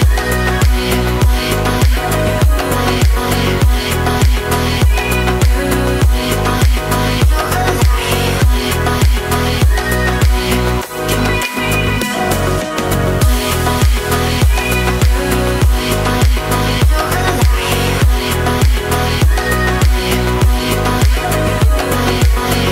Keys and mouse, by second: 1.7 s, 3.1 click, 3.9 3, 4.3 shift+middle drag, 4.8-5.7 drag, 6.8 x, 8.2-9.3 middle drag, 9.7 shift+middle drag, 10.2-12.2 middle drag, 12.8-17.6 drag, 17.8-19.1 middle drag, 19.3 shift+middle click, 20.1 a, 20.3 middle click, 21.0 KP_7, 21.5 KP_1.